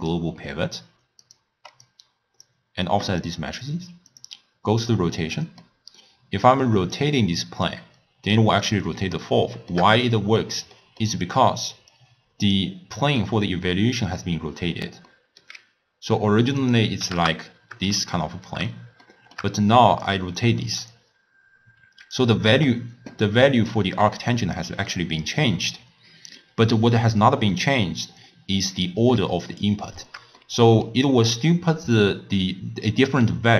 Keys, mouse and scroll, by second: 1.9-4.4 drag, 5.2-7.0 middle drag, 7.0-9.2 drag, 9.2-11.9 shift+middle drag, 11.9 click, 13.2 click, 15.1 middle click, 15.7 scroll down 3, 16.6-19.0 drag, 19.0-20.0 shift+middle drag, 20.0-23.0 drag, 23.7-26.7 drag, 28.8-29.1 scroll up 4, 29.4-31.4 shift+middle drag, 31.4-33.5 d.